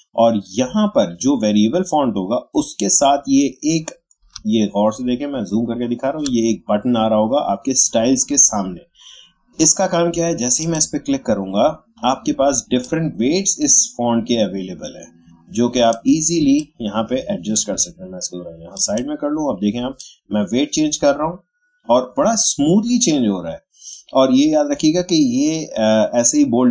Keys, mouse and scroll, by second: 4.6 shift+scroll up 1, 9.3 scroll down 1, 10.6-16.4 drag, 16.4 space, 16.6 click, 18.7-26.7 drag.